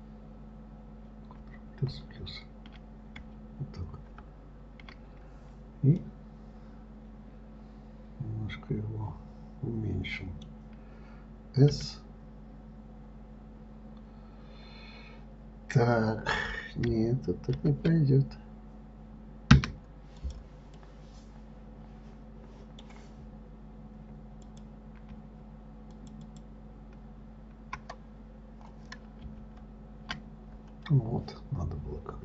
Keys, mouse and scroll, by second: 1.8 ctrl+KP_Add, 2.3 ctrl+KP_Add, 6.4-9.4 middle drag, 20.6 click, 21.1-24.1 middle drag, 24.8 click, 26.3 shift+click, 26.6 shift+click.